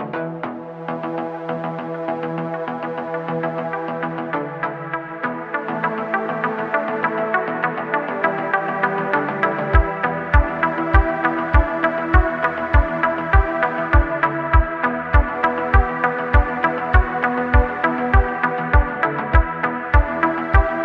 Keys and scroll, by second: 0.5 3, 0.9 i, 1.7 e, 3.4 Tab, 5.1 shift+d, 5.3 x, 6.9 ., 7.9 s, 11.3 s, 12.2 s, 14.1 3, 15.0 Tab, 17.0 s, 18.5 Tab.